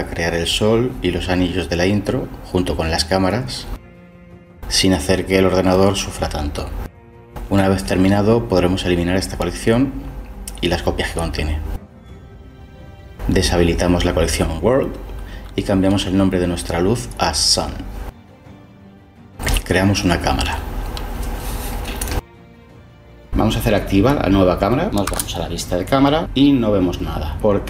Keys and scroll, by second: 1.7-4.4 typing, 4.7 Return, 5.0 Return, 11.1-12.0 typing, 14.8 ctrl+j, 19.6 shift+a, 25.0 0.